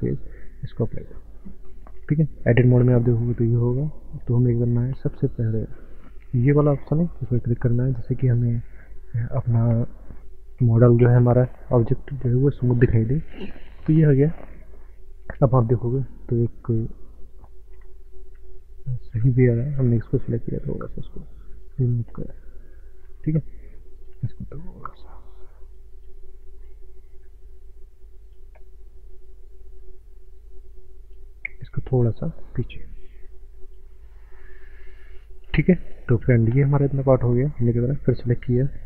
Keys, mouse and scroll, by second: 0.9 middle click, 1.0 middle click, 2.4 Tab, 7.4 click, 15.4 middle click, 17.7 KP_7, 18.4-18.7 scroll up 5, 18.9 shift+middle click, 19.0 shift+middle click, 19.5 click, 20.8 click, 22.0 shift+middle click, 22.5 shift+middle click, 22.7 shift+middle click, 23.0 shift+middle click, 23.2 shift+middle click, 24.0 click, 26.1 click, 26.4 shift+middle click, 28.2 click, 31.6 click, 32.6 click, 34.4 click, 35.5 z, 36.0 scroll down 4, 36.2 middle click, 36.3 middle click.